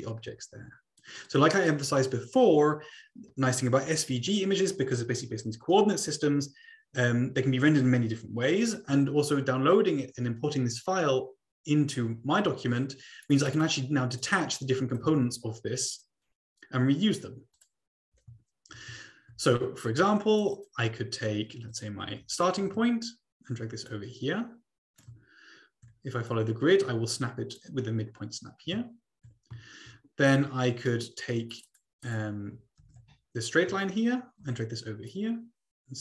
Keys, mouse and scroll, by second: 1.9 click, 2.3-3.8 scroll down 2, 2.3-3.8 middle drag, 13.2 click, 14.2 click, 15.2 ctrl+z, 15.7 click, 17.5 click, 18.4-19.3 ctrl+scroll up 2, 20.4 click, 20.6 click, 21.7 click, 22.2 ctrl+c, 22.6 ctrl+v, 23.8-25.0 drag, 25.2-26.4 ctrl+scroll up 2, 26.4-27.6 drag, 29.2-30.9 ctrl+scroll down 3, 30.9 middle click, 31.5 click, 32.0 click, 32.8 ctrl+c, 34.2-34.8 ctrl+scroll up 2, 34.6 ctrl+v, 35.2-36.0 drag.